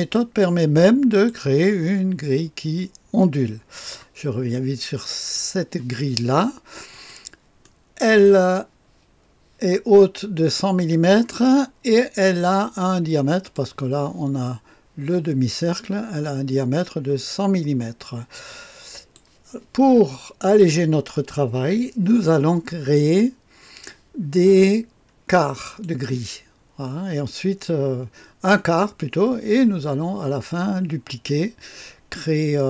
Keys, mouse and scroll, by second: 1.1-4.4 drag, 5.1 click, 6.9-8.4 drag, 7.6-9.0 right drag, 12.4-14.2 drag, 15.1-19.2 drag, 20.4 click, 25.4-26.8 drag.